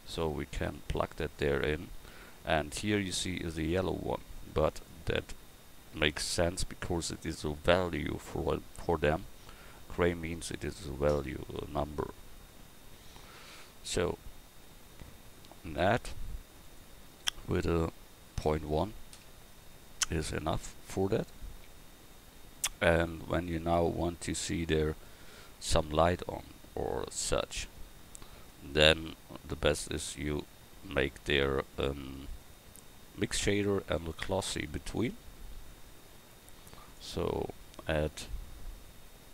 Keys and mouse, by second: 23.1 click, 28.3-31.3 middle drag, 31.3-32.6 drag, 34.1-36.8 drag.